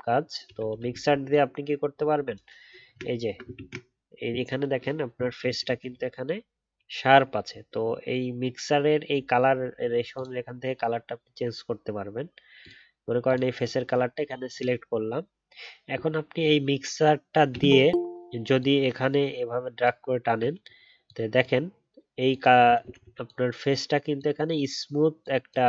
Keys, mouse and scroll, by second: 3.0-3.5 alt+scroll up 2, 3.5 ctrl+z.